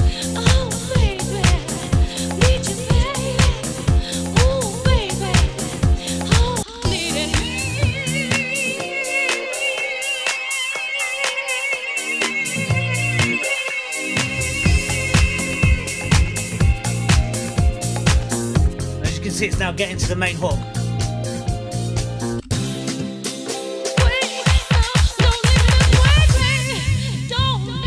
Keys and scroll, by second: 6.4 space, 22.2 space.